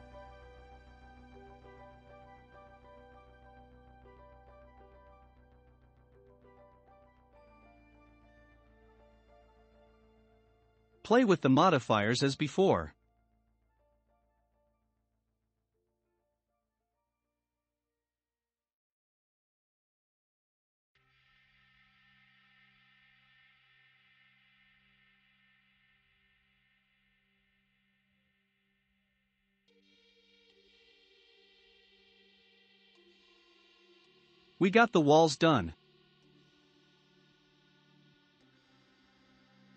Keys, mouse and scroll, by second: 0.0-6.5 drag, 7.8 click, 9.2-12.4 drag, 12.8-16.0 drag, 18.5-21.8 drag, 21.8-25.0 shift+middle drag, 25.0-26.0 drag, 26.0-27.4 shift+middle drag, 27.4-27.7 scroll up 1, 27.7-28.2 middle drag, 28.2-29.1 scroll down 1, 29.1 s, 32.2-32.6 scroll down 3, 32.6-33.8 shift+middle drag, 33.8-34.6 drag, 34.6-38.7 middle drag, 38.7-39.4 scroll down 2.